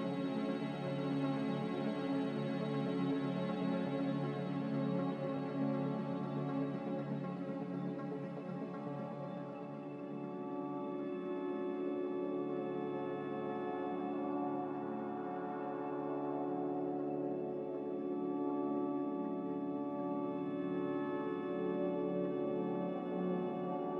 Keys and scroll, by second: 2.5 typing, 3.7 typing, 11.2 ctrl+z, 11.7 ctrl+z, 23.5 a.